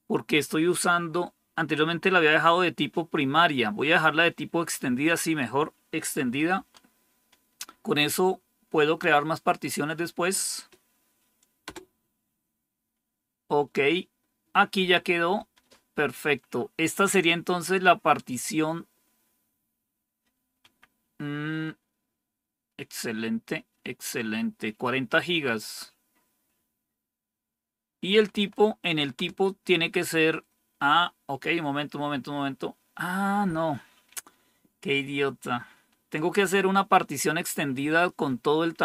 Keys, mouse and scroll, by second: 6.5 Right, 11.5 Return, 15.4 Down, 20.5 Up, 28.2 Right, 29.1 Return.